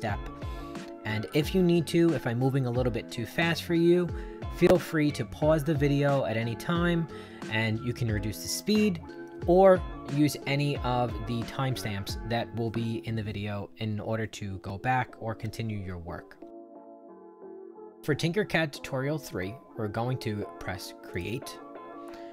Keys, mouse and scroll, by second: 21.1 click.